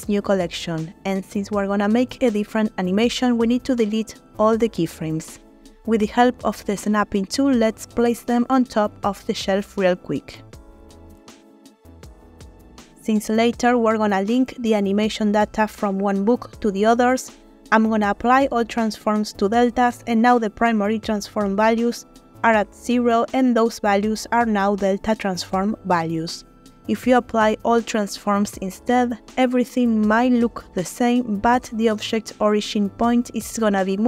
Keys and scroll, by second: 3.7 a, 4.4 Delete, 8.0 g, 8.2 y, 9.1 z, 11.3 g, 11.5 x.